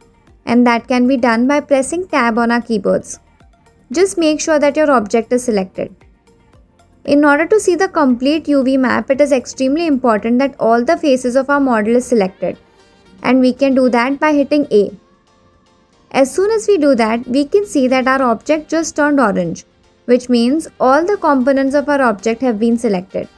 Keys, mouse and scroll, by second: 0.5 middle click, 2.3 Tab, 13.6 a.